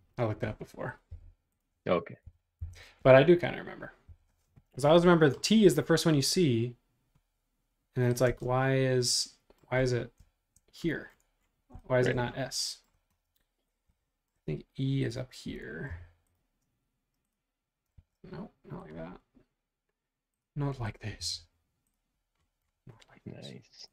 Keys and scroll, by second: 1.1 Page_Up, 2.0-3.1 typing, 4.5 Up, 8.2 space, 15.9 m, 18.1 super+z, 18.9 super+z, 21.2 Up.